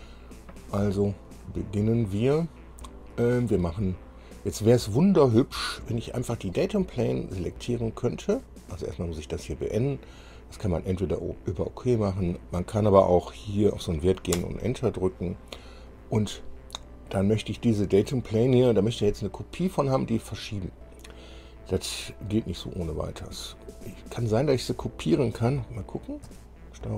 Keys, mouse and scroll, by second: 5.4-5.8 scroll down 2, 6.7 click, 9.1 click, 11.4 click, 12.5 click, 13.5 click, 14.5 Return, 23.7 click, 26.4 ctrl+c.